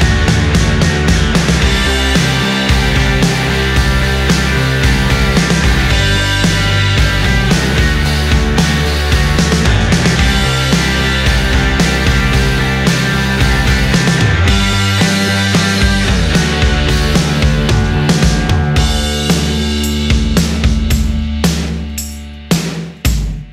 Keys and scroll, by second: 1.0 ctrl+z, 5.2 ctrl+z, 6.9 ctrl+z, 7.4 ctrl+z, 8.3 ctrl+z, 10.9 ctrl+z, 11.4 ctrl+z, 15.0 space, 15.4 space, 16.9 ctrl+z, 20.4 space, 20.6 space, 22.4 ctrl+z, 22.9 ctrl+z.